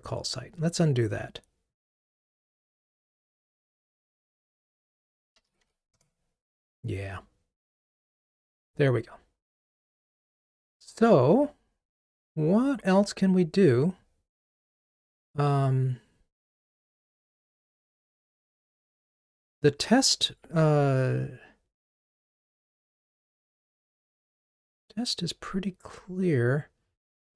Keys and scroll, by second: 7.9 alt+F12.